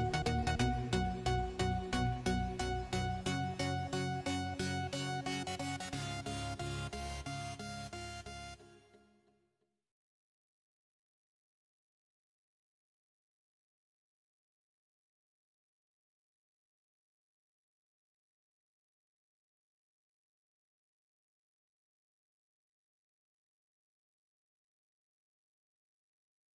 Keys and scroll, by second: 2.2-3.0 typing, 4.6 1, 5.7 0, 8.3-9.5 typing, 11.1-12.0 typing, 15.8-17.0 typing.